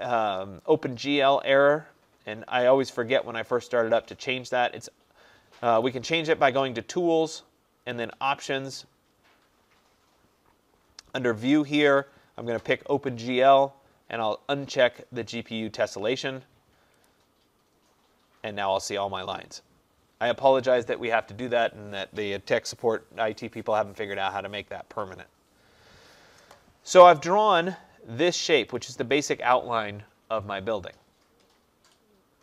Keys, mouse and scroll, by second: 5.9 click, 8.1 click, 11.2 click, 12.1 click, 15.0 click, 28.8 click.